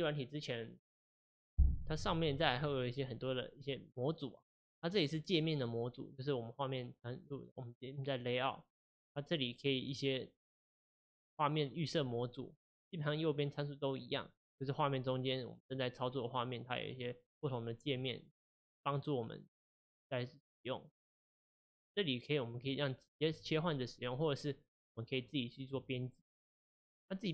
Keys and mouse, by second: 10.7 click, 12.2 click, 14.6-15.7 drag, 17.0 click, 18.4 click, 18.9-19.8 drag, 21.0 click.